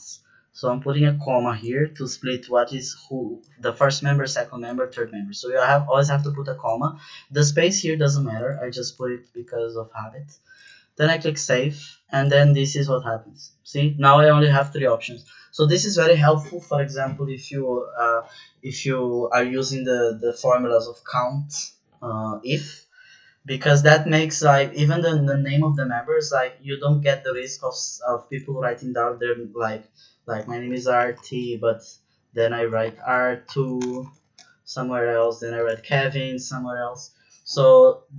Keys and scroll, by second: 30.3-36.6 typing.